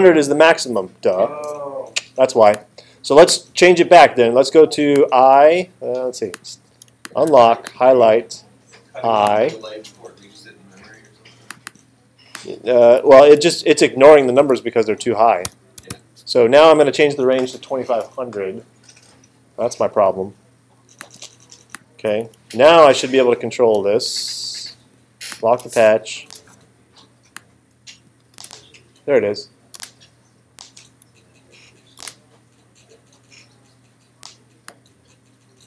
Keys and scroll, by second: 13.6 Left, 14.1 BackSpace, 15.5 5, 15.8 0, 26.3 super+space, 28.3 space, 29.8 space, 32.0 space.